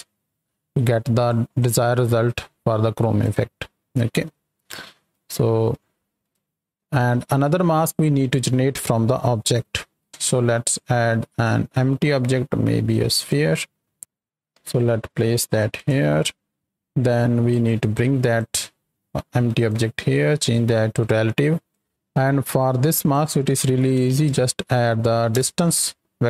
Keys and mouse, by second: 0.8-1.2 drag, 1.5-3.2 drag, 4.0 middle click, 4.8 right click, 6.2 ctrl+click, 6.4 shift+click, 10.0 shift+a, 13.9 s, 14.5 g, 15.7 click, 16.0 shift+middle click, 16.6 right click, 17.8 click, 18.0-18.3 drag, 18.6-18.9 drag, 19.6 click, 20.1 click, 21.4-21.7 drag, 22.4 click.